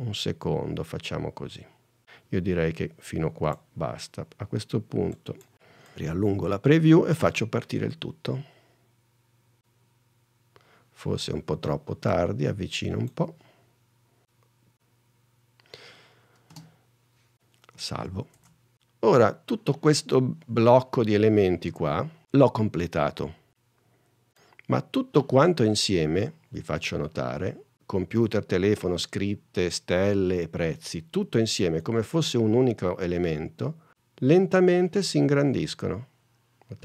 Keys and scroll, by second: 5.6 n, 7.4 h, 16.7 h, 18.1 super+s, 18.5 super+Tab, 24.0 space, 33.9 space.